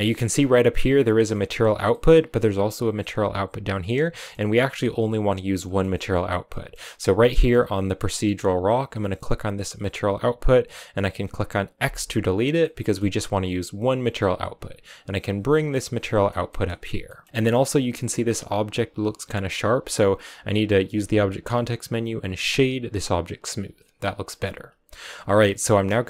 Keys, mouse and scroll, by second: 0.8 scroll down 5, 1.6 scroll down 3, 1.8 middle click, 2.1-3.6 scroll up 6, 3.6-4.0 scroll down 4, 4.0-9.7 middle drag, 9.7 click, 11.8 x, 11.8 middle click, 12.3 scroll down 5, 12.5-14.5 middle drag, 14.5 click, 14.6-15.9 drag, 15.9 middle click, 16.2 scroll down 1, 16.4 middle click, 16.6 a, 17.0-19.1 shift+middle drag, 20.9 w, 24.0 scroll down 2, 24.2 middle click, 24.5 a, 25.0 a.